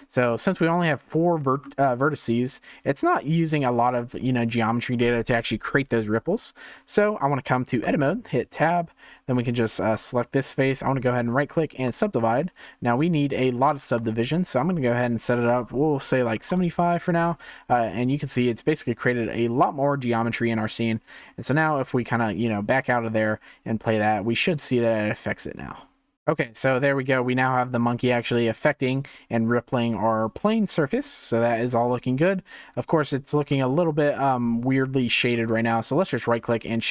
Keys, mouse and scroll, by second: 0.2-1.3 shift+middle drag, 1.3-1.8 scroll down 1, 1.8-4.8 shift+middle drag, 7.8 Tab, 9.7 3, 9.9 click, 11.1-13.9 right drag, 13.9-17.9 drag, 21.2 Tab, 22.4-27.1 drag, 27.1-28.1 scroll up 3, 28.1-31.0 drag, 31.0-33.2 middle drag, 33.2-35.3 scroll up 5, 35.3-36.1 scroll down 2, 36.1-36.9 right drag.